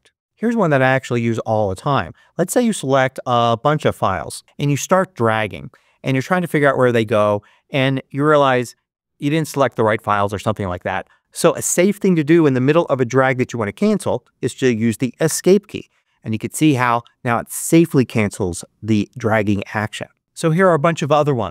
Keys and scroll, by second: 15.1 ↺.